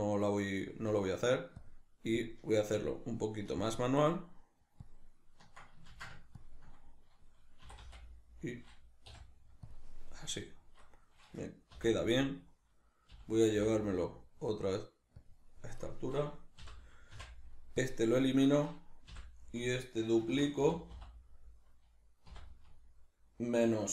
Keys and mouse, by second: 1.6-6.0 ctrl+drag, 6.0 ctrl+z, 6.4-7.7 ctrl+drag, 7.7 e, 9.8 click, 10.4 right click, 11.8 l, 15.3 click, 15.8 right click, 16.6 l, 18.4 right click, 19.1 l.